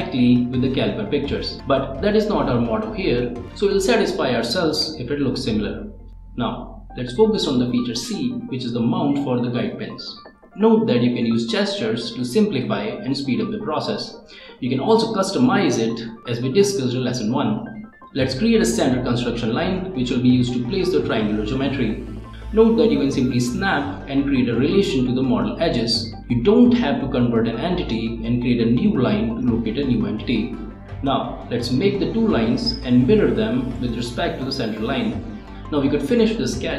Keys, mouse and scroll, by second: 0.3 click, 0.8 click, 2.2 click, 3.6 click, 4.5 click, 5.7 click, 6.3 click, 6.9 click, 7.4 click, 10.8 click, 11.6-14.4 right drag, 14.3 click, 14.4 click, 16.0 click, 16.9 click, 17.7-19.8 right drag, 19.8 click, 20.8 right click, 23.0 click, 25.2-29.5 drag, 31.6 right click, 33.7 click, 34.5 click, 36.1 click.